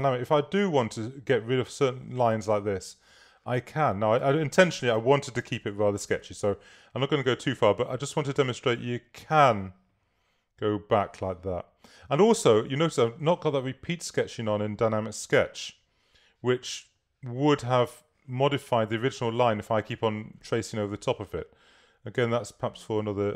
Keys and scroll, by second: 0.2 BackSpace, 4.3 BackSpace, 5.4 k.